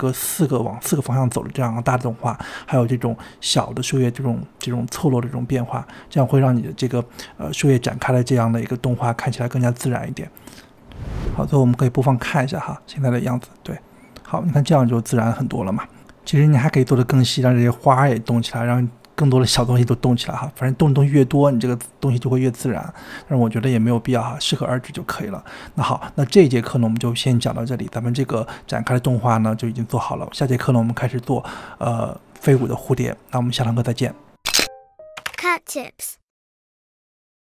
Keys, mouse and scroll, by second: 0.2 space, 0.4 click, 1.3-3.8 typing, 1.9 click, 3.0 click, 4.1-5.1 drag, 5.2-5.6 drag, 5.9 click, 6.1 g, 6.6 i, 6.8-7.4 drag, 7.9-8.4 drag, 8.4 space, 8.6 space, 9.0-10.5 drag, 9.8-11.9 typing, 11.6 click, 15.1 space, 16.1-19.2 drag, 20.1-21.9 drag, 21.9 space, 24.3 space, 27.6-30.9 drag, 30.9 ctrl+s.